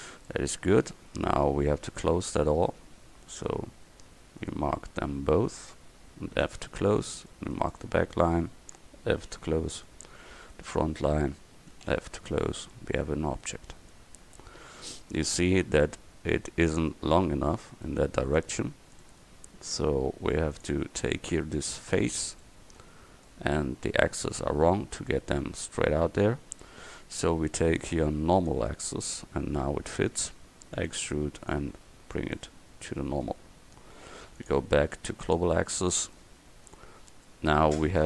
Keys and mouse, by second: 0.5 middle click, 5.9 right click, 6.5 f, 9.3 f, 11.8 f, 12.4 Tab, 18.4 Tab, 21.8 right click, 22.5-25.8 middle drag, 27.5-28.8 drag, 30.8 e, 33.3 Tab, 35.8 middle click, 36.5 middle click.